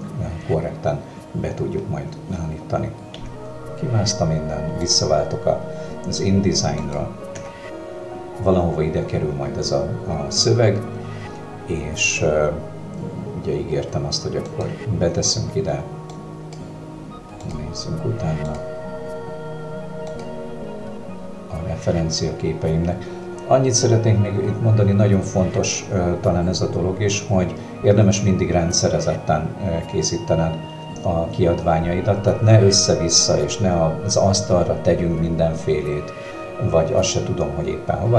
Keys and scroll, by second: 4.9 Escape, 7.4 w.